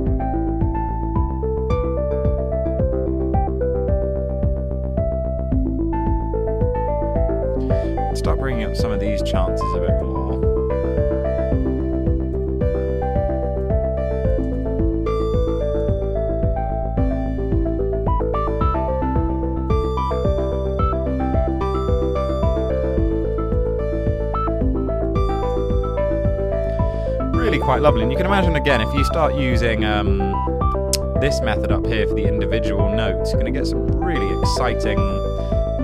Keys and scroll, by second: 9.4-10.3 typing, 11.8-12.6 typing, 14.0-16.0 typing, 17.9-25.8 typing.